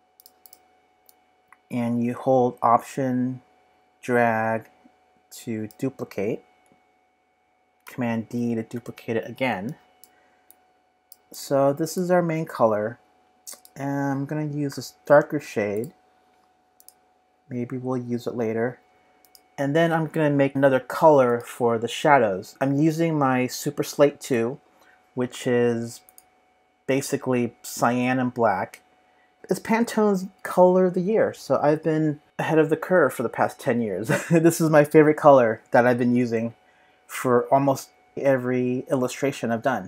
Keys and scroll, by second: 7.8 super+d, 8.4 super+d.